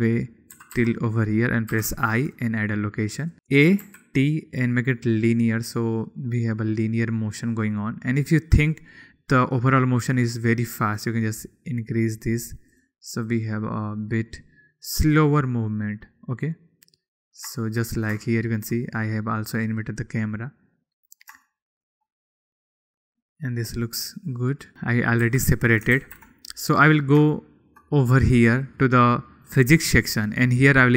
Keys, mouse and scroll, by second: 0.3 shift+middle click, 1.1 g, 1.3 y, 1.8 click, 2.3 i, 3.6 a, 4.4 t, 6.1 click, 9.2 click, 10.2-10.9 drag, 11.5 click, 13.3 click, 13.8 click, 16.9 click, 18.1-18.4 shift+middle drag, 18.7-19.3 shift+middle drag, 22.1 shift+middle click, 24.7 ctrl+z, 25.8 g, 26.6 ctrl+z, 27.9-28.4 shift+middle drag, 29.2 click.